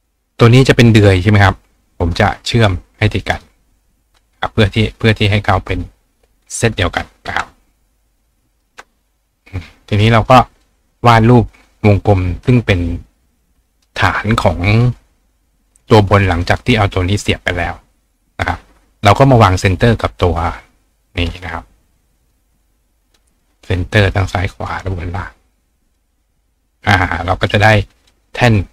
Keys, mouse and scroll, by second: 1.0 click, 1.4-2.1 drag, 3.3 click, 3.9 click, 4.7 click, 5.6 click, 6.4-7.0 drag, 8.0 click, 9.0-10.6 drag, 12.5-13.8 ctrl+drag, 14.7 click, 15.6 click, 19.7 click, 20.1 click, 22.2 click, 23.1 click, 23.9 click, 24.6 click, 25.9 click, 27.0 click.